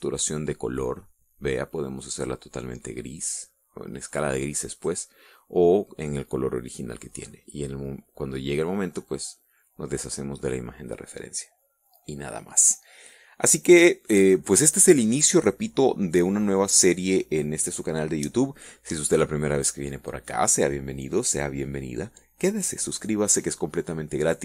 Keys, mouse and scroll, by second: 0.4-3.2 drag, 4.8-5.8 drag, 9.8 click.